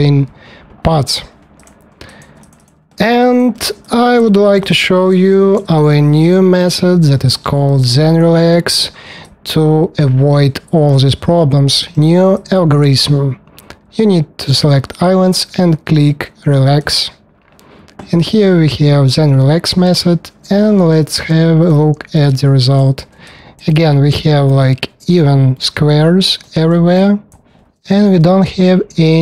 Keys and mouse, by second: 1.5 click, 2.4 click, 2.6 alt+middle click, 5.2 shift+d, 21.0 w, 22.1-23.2 middle drag.